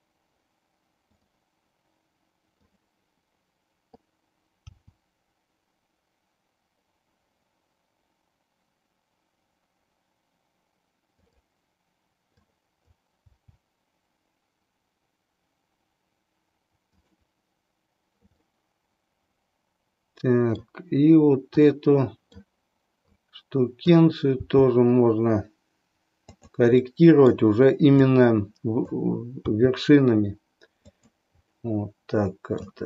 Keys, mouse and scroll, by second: 2.9 click, 4.6 g, 11.3 click, 12.3 click, 13.3 g, 16.8 click, 18.4-20.7 middle drag, 21.7 middle click, 23.2 click, 24.4 g, 26.9 middle click, 28.2 click, 29.6 g, 31.5-32.8 middle drag.